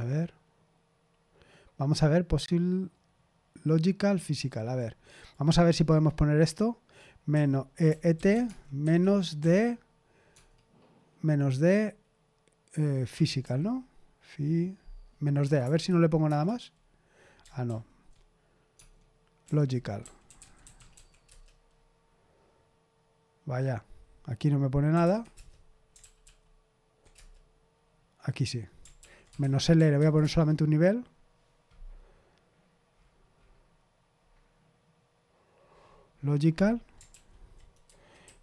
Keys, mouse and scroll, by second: 5.2-7.3 drag, 7.8-10.3 typing, 13.1-13.4 typing, 15.4 BackSpace, 15.6 BackSpace, 15.7 BackSpace, 16.2 Return, 17.6 ctrl+p, 18.7-21.4 typing, 24.6-25.5 typing, 25.9 ctrl+p, 26.2 ctrl+p, 27.1 Return, 28.9 ctrl+p, 29.1-30.4 typing, 37.1 ctrl+p, 37.8 Left, 38.2 Left.